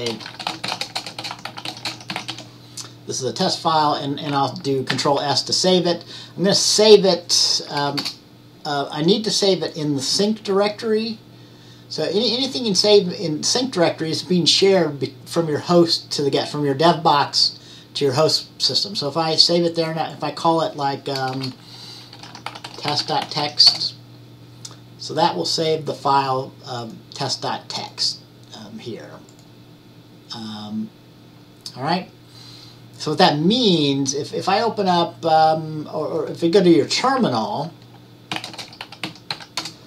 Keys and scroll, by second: 0.1-2.9 typing, 5.0 ctrl+shift+c, 7.0-8.1 typing, 21.4-24.0 typing, 38.2-39.8 typing.